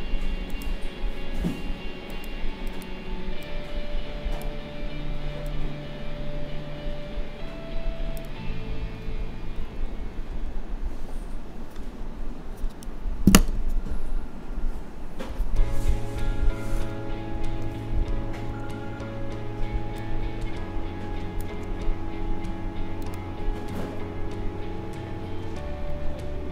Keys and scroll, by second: 9.6 Left, 10.0 Down, 10.3 Right, 16.8 ctrl+c, 17.6 ctrl+f.